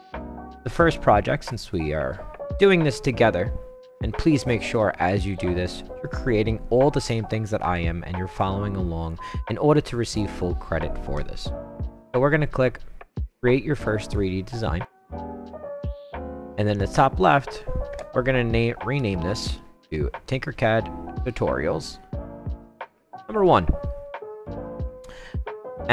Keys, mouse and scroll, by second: 14.0 click, 16.7 click, 18.7-19.9 typing, 21.2 click, 22.1 click, 23.4 click.